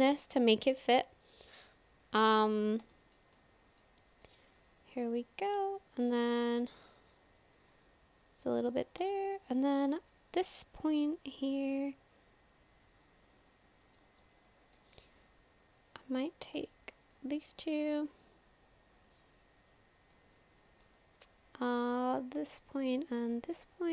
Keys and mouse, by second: 0.7 click, 0.7-2.6 middle drag, 0.9 click, 1.1 click, 2.9 shift+middle click, 3.4 middle click, 6.2 middle click, 7.7 click, 9.1 shift+middle click, 10.8-14.0 drag, 14.7 ctrl+z, 17.1 shift+click, 17.8-19.4 drag, 20.7 ctrl+z, 22.0 click.